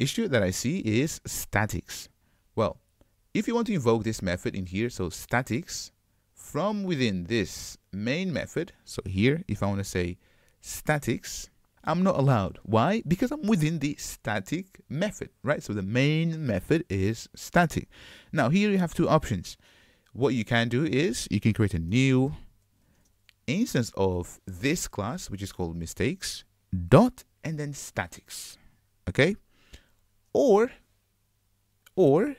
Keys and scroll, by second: 9.7 super+y, 11.4 Return, 11.7 super+z, 25.8 Return, 28.3 Return.